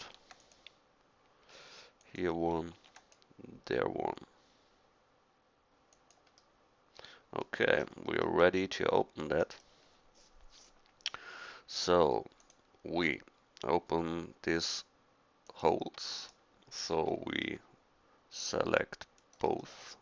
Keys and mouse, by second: 0.0 ctrl+r, 2.7 ctrl+r, 6.6 middle click, 7.8 middle click, 19.6 middle click, 19.8 middle click.